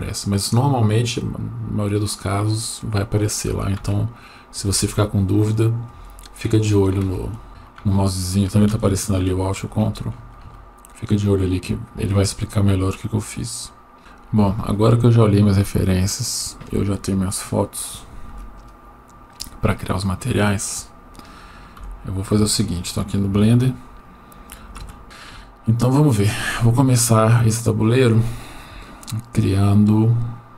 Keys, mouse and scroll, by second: 18.3 Tab, 21.8 Delete.